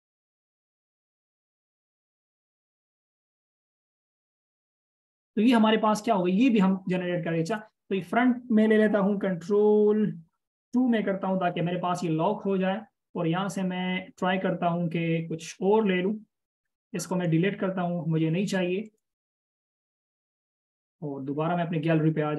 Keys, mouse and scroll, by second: 2.0 alt+shift+click, 5.5-6.1 scroll down 1, 6.1-7.2 scroll up 1, 11.7 ctrl+2, 13.1 space, 18.5 space, 19.2 right click.